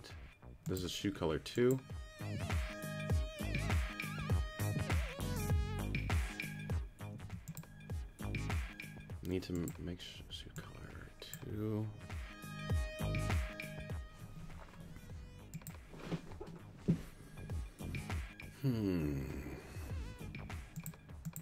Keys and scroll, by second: 7.2 q.